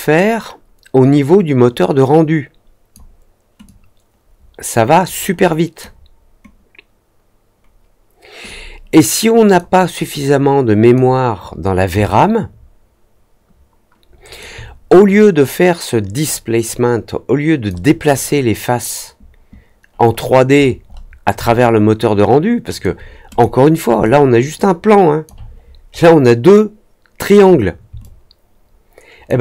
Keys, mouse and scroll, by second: 3.6-5.7 drag, 8.4-9.5 drag, 10.1 click, 12.0-14.3 alt+drag, 16.2-17.6 drag, 20.1 middle click, 20.5 middle click, 20.8 middle click, 21.4-22.7 alt+drag, 23.2 click, 24.0-25.2 alt+drag, 25.5 middle click, 25.9 middle click, 27.9-29.2 alt+drag.